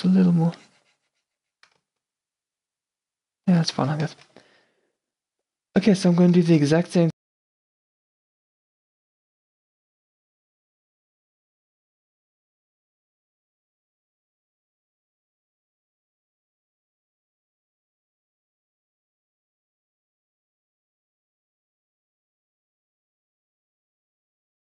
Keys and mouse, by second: 3.6 f, 7.5 Tab, 7.5-8.4 drag, 7.5 q, 7.7 a, 10.6-11.1 drag, 12.8 z, 13.3 z, 13.3 a, 13.6-14.4 middle drag, 14.3 Tab, 14.4-17.5 typing, 15.6 middle click, 15.7 Tab, 16.6 Tab, 17.2 middle drag, 17.8 middle click, 18.5 Tab, 20.4 middle click, 20.5 shift+c, 20.8 ctrl+z, 21.2 shift+f.